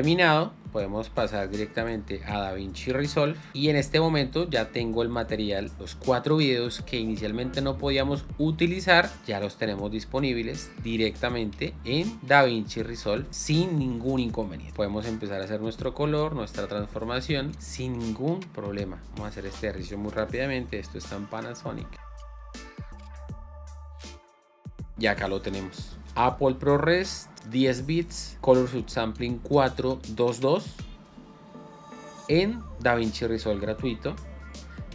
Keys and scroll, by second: 3.5 alt+Tab, 14.7 shift+6, 21.5 p, 22.9 r, 23.6 g, 24.6 space.